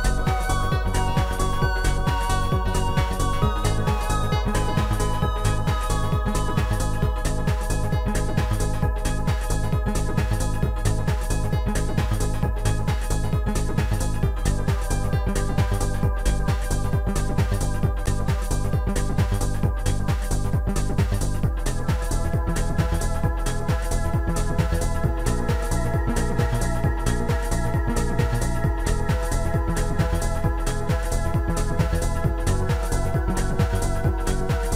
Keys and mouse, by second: 2.5 click, 2.5 right click, 2.9 click, 4.0 shift+click, 6.2 shift+click, 7.3 shift+click, 10.9 click, 12.9 click, 15.7 click, 17.4 click, 18.4 click, 19.7 click, 26.4 click, 27.1 click, 30.8 shift+click, 33.5 shift+click.